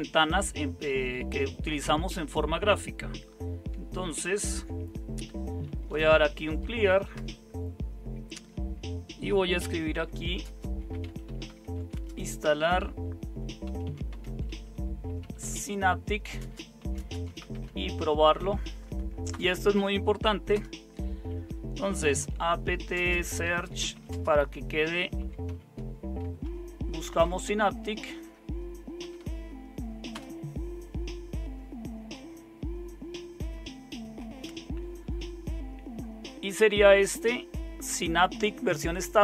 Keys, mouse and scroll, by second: 4.2 super+0, 5.6-6.9 typing, 7.1 Return, 9.4-12.2 typing, 13.4-30.1 typing.